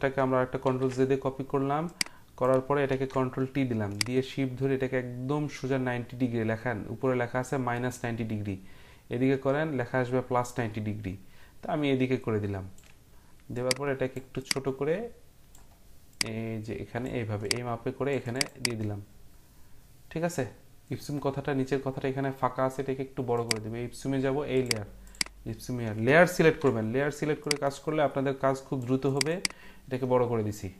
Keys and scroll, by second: 0.6 ctrl+j, 2.9 ctrl+t, 26.4 ctrl+t.